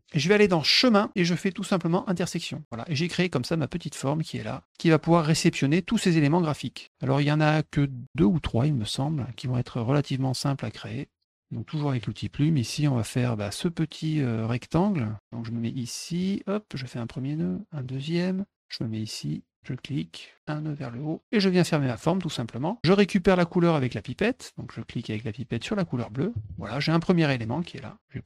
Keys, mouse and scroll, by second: 0.8 click, 2.1 click, 2.6 middle click, 8.9 middle click, 12.0 click, 12.5 middle click, 16.2 click, 17.8 click, 19.5 click, 20.7 click, 21.8 click, 23.9 click, 25.5 click, 27.0 middle click.